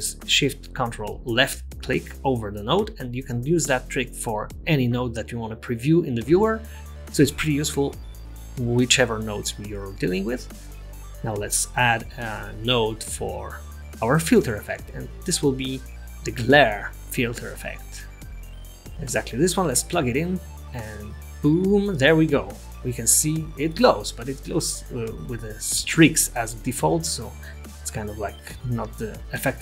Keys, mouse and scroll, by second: 3.5 click, 9.1-10.2 scroll down 6, 10.6 click, 11.9 shift+a, 22.5 middle click, 23.2-24.4 scroll up 3, 24.4 scroll up 2, 28.0 click.